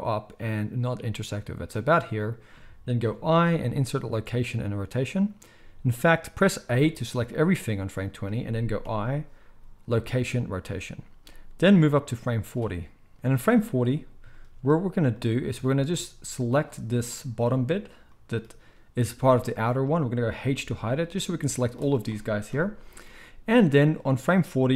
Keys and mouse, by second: 3.0 i, 6.6 a, 8.8 i, 11.2-16.5 drag, 16.5-21.0 middle drag, 20.3 h, 21.0-24.7 drag, 22.4 KP_1.